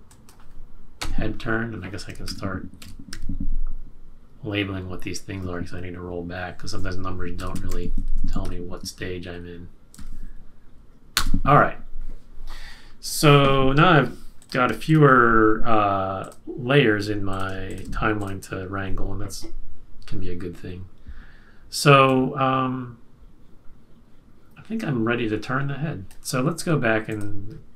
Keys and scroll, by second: 2.8 typing, 5.2 BackSpace, 5.3 BackSpace, 7.1-10.4 typing, 11.1 Return.